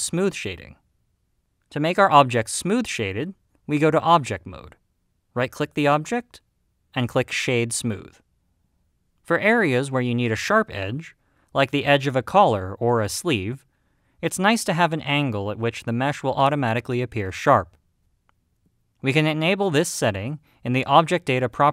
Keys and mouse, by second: 3.6-4.2 drag, 5.9 right click.